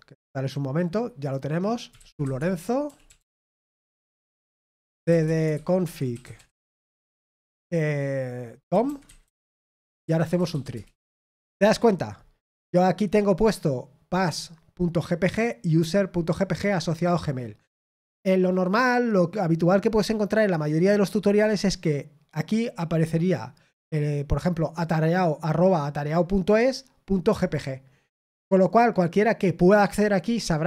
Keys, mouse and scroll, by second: 5.7-7.3 typing.